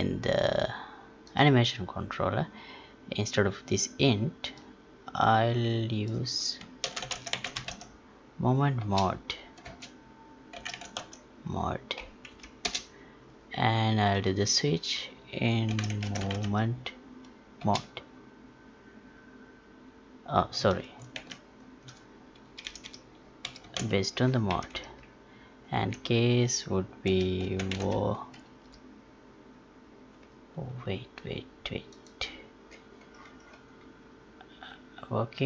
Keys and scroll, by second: 9.6 space, 21.1 ctrl+z, 24.5 Down, 25.7 Left.